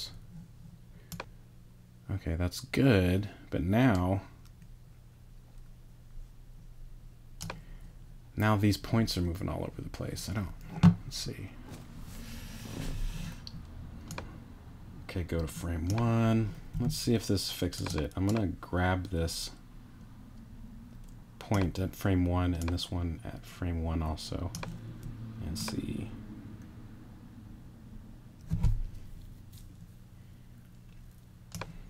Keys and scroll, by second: 16.7 t.